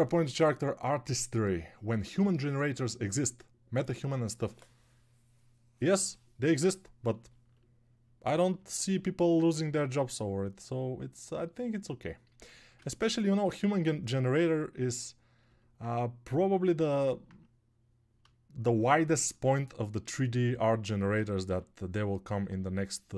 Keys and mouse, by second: 9.7 ctrl+1.